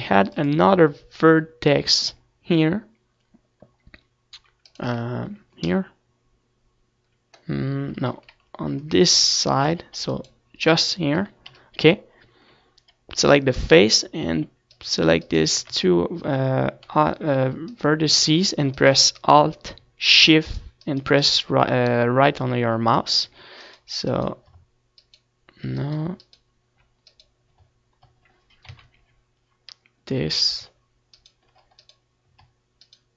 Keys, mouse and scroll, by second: 1.2 ctrl+r, 6.1 right click, 6.2 z, 7.0 middle click, 9.2 ctrl+z, 10.1 ctrl+r, 11.4-13.4 right drag, 12.8 KP_1, 13.2 z, 13.5-16.1 middle drag, 14.6 click, 14.9-16.1 drag, 16.0 right click, 16.4-29.9 right drag, 29.9 z, 32.3-33.1 right drag.